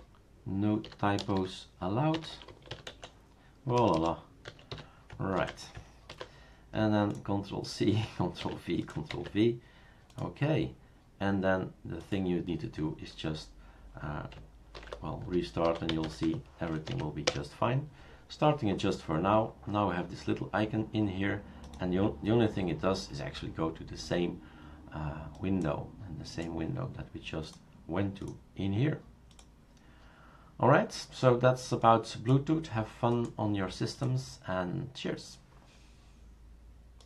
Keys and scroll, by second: 0.0-4.7 typing, 5.3 ctrl+a, 6.1 ctrl+c, 8.4 ctrl+v, 9.1 ctrl+v, 14.7 shift+super+d, 15.4-16.7 typing, 16.9 Right, 17.2 Return.